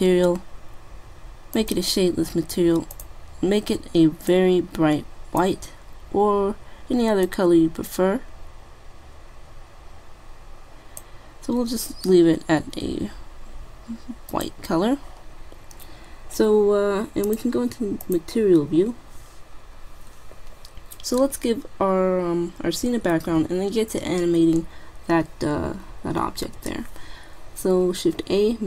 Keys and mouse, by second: 0.5-1.6 middle drag, 1.6-4.8 drag, 17.3-18.9 drag, 23.1 shift+a, 23.1 shift+a.